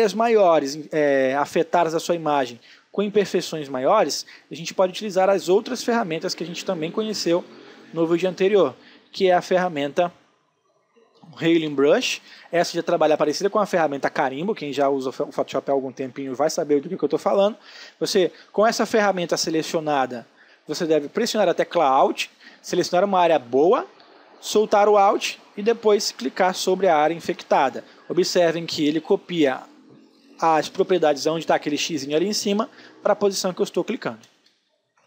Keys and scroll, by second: 11.2 ctrl+space, 34.0 space.